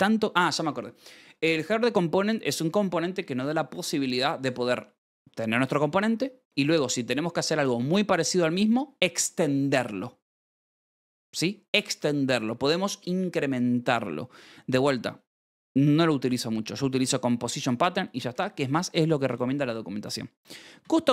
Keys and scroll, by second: 18.4 Escape, 19.7-21.1 typing.